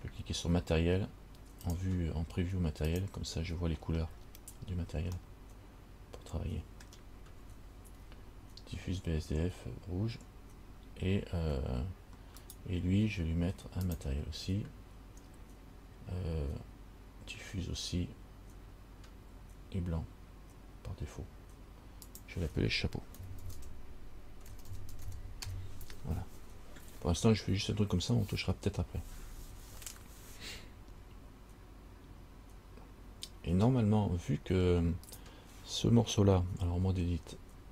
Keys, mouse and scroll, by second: 1.8 click, 4.2-5.0 scroll down 5, 5.4 middle click, 12.6 right click, 14.0 click, 22.2 click, 34.1-35.3 scroll up 3, 35.3 right click, 37.0 Tab.